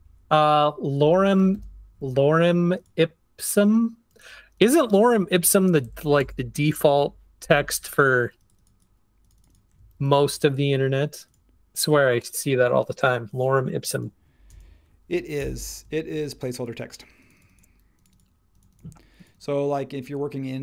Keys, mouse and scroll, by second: 0.8-1.5 typing, 5.8 shift+Down, 6.0 shift+Down, 6.2 shift+Down, 6.6 shift+Up, 10.0 super+t, 15.4 shift+Up.